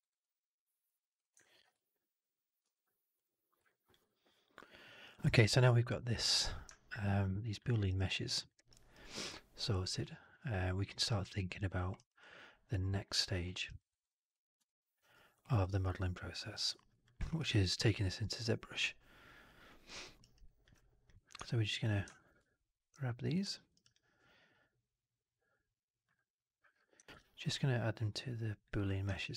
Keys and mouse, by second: 0.1-0.7 alt+drag, 1.0 click, 1.3 alt+drag, 2.5 ctrl+s, 3.6 click, 6.8-7.5 alt+drag, 7.6 alt+middle drag, 7.7 alt+right drag, 8.0-8.3 alt+drag, 8.6 alt+right drag, 9.0-11.4 alt+drag, 11.6 alt+middle drag, 11.8 alt+right drag, 12.1-13.1 alt+drag, 13.3 alt+middle drag, 13.5 alt+right drag, 13.8 alt+right click, 14.2-14.5 alt+drag, 14.8 alt+right click, 15.3 alt+middle drag, 15.6 alt+right drag, 15.8-16.2 alt+drag, 16.4 alt+right drag, 16.8 alt+drag, 17.0 alt+middle drag, 17.2 alt+right drag, 17.4-17.8 alt+drag, 17.9 alt+right drag, 18.3-19.7 alt+drag, 19.9 alt+middle drag, 20.1 alt+right drag, 20.3 alt+click, 22.0 alt+middle drag, 23.2 shift+click, 23.4 alt+middle drag, 23.6 alt+right drag, 23.8-25.9 alt+drag, 27.0 ctrl+g, 29.0 alt+drag.